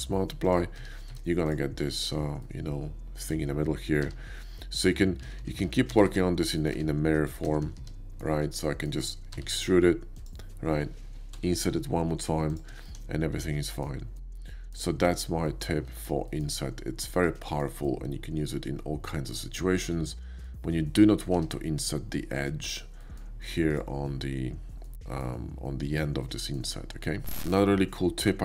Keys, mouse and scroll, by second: 0.4 click, 0.8 Tab, 1.1 Tab, 1.5 click, 1.8 shift+click, 2.4 middle click, 4.0 e, 4.8 click, 5.2 ctrl+z, 5.4 ctrl+z, 5.7 ctrl+z, 6.4 middle click, 6.7 Tab, 7.5 ctrl+z, 7.9 ctrl+z, 8.6 middle click, 9.3 e, 10.2 click, 11.3 i, 12.5 shift+click, 12.8-13.8 shift+middle drag, 14.1 shift+middle click, 15.5 shift+middle click, 16.3 shift+middle click, 17.4 shift+middle click, 17.8-20.4 shift+middle drag, 21.4 Tab, 21.8 click, 23.0 middle click, 23.7 click, 24.6 middle click, 26.1 middle click, 27.4 shift+a.